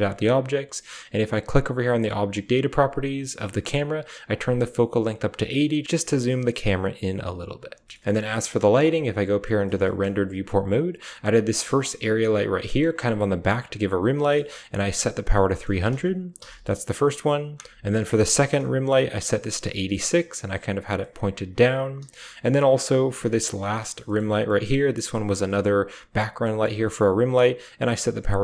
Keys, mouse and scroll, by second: 4.1-5.3 drag, 5.8-7.1 shift+drag, 7.9 middle click, 8.3 z, 9.5 shift+middle drag, 9.7 drag, 11.1 g, 11.9 drag, 16.4 h, 17.9 middle click, 17.9 drag, 18.2 click, 19.7 middle drag, 20.9-21.5 middle drag, 21.9 h, 24.5 drag, 26.4 drag.